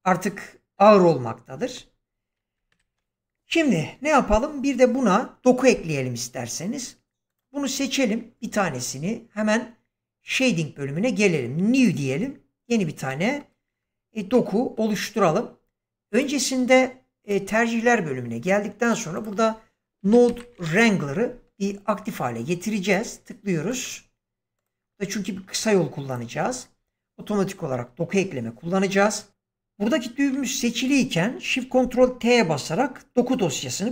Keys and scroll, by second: 1.6 space, 2.6 shift+Left, 19.9-20.5 typing.